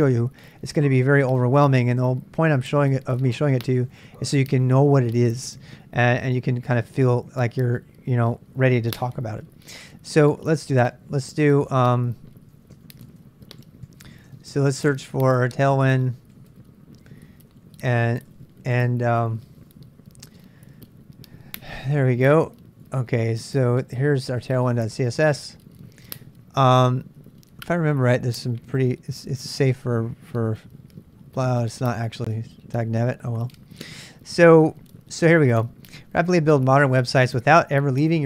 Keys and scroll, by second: 10.6 ctrl+a, 10.8 ctrl+a, 12.6-18.6 typing, 20.4 typing, 21.4-21.8 typing, 22.8 typing.